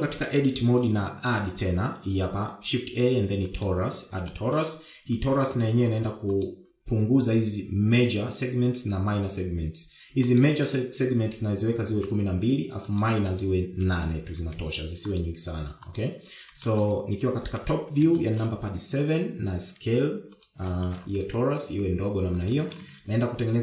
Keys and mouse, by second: 0.2 Tab, 0.7 shift+middle click, 1.4 shift+middle click, 2.4 shift+a, 5.4 middle click, 7.4 click, 11.3-14.1 drag, 14.4-16.3 drag, 17.8 shift+middle click, 18.5 KP_7, 19.2 shift+middle click, 20.7 s, 21.8 shift+middle click, 22.8 s.